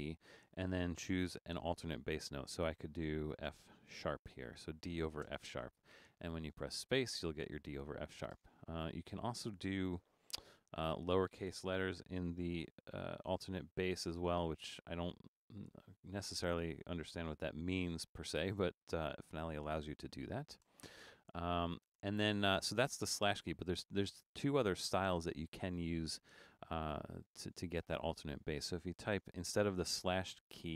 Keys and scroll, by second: 3.5 shift+f, 3.9 shift+3, 5.3 space, 8.5 space, 10.5-12.3 typing, 13.3-14.1 typing, 19.8 BackSpace, 20.7 BackSpace, 24.5 BackSpace, 29.6 shift+d.